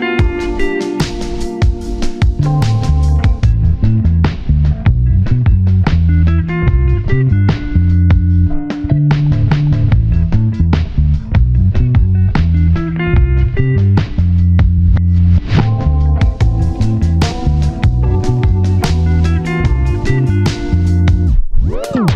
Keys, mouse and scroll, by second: 0.5 shift+click, 1.0 typing, 3.6 scroll up 1, 3.7 typing, 3.9 shift+scroll down 1, 4.2-4.8 scroll up 1, 5.1 1, 6.3 alt+z, 8.3 scroll up 1, 16.3 alt+shift+click, 16.4 ctrl+z.